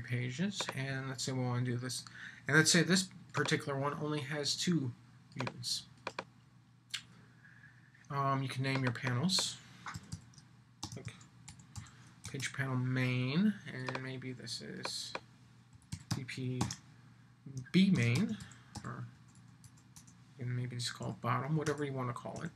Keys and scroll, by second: 10.8 shift+m, 12.2 Return, 16.6 shift+b, 17.9 shift+m.